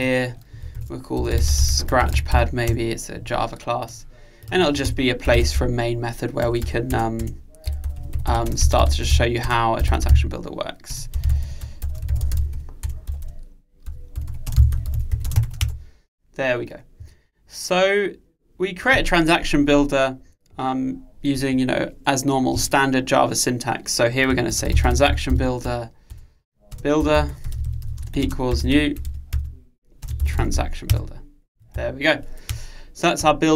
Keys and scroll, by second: 26.2 Return, 29.1 super+1.